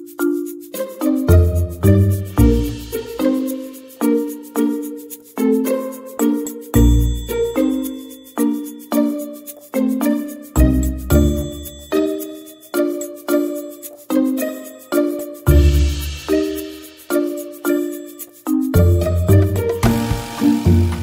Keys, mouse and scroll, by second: 5.3-10.5 typing, 7.8 Tab, 11.5 ctrl+l, 11.6 z, 11.8 c, 12.0 z, 13.2 ctrl+z, 13.4 Tab, 13.4 a, 13.6 a, 14.4 Tab, 14.8 a, 15.1 shift+s, 15.3 Tab, 16.1 alt+h, 16.4 Tab, 17.5-21.0 typing, 17.7 Tab, 19.7 Tab.